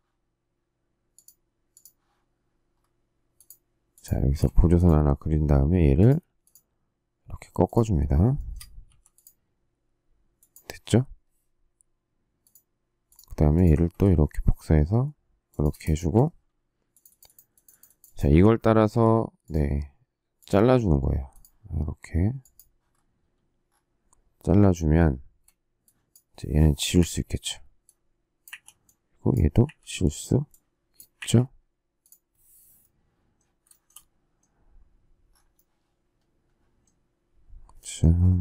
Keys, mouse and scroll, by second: 4.2 space, 5.5 q, 8.3 shift+middle click, 8.8 m, 15.4 shift+click, 15.9 space, 18.8 alt+x, 25.1 space, 26.9 Delete, 28.4 Delete, 29.6 Delete, 31.1 Delete, 33.6 shift+middle click.